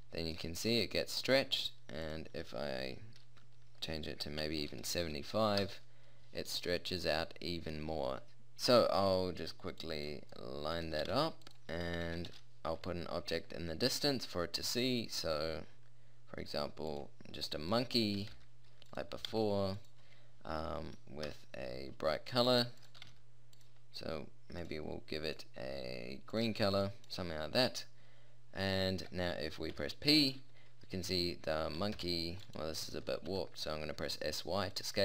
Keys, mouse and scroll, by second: 0.4-6.4 middle drag, 7.1-7.7 middle drag, 8.3 a, 8.9 middle click, 9.1-10.2 middle drag, 10.5 middle click, 10.8-11.8 drag, 11.1 g, 11.8 middle click, 12.0-12.3 middle drag, 12.3 shift+a, 17.6 middle click, 17.8 middle click, 18.3 g, 19.3 g, 21.3 KP_0, 22.5 g, 23.0 r, 32.0 p, 33.0 s, 34.4-35.0 drag.